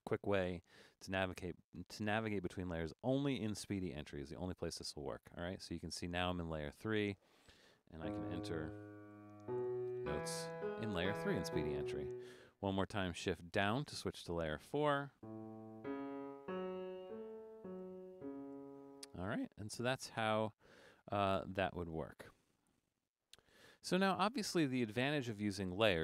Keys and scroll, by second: 0.5 shift+Down, 9.2-12.1 typing, 13.1 typing, 13.6 shift+Down, 15.5-18.6 typing.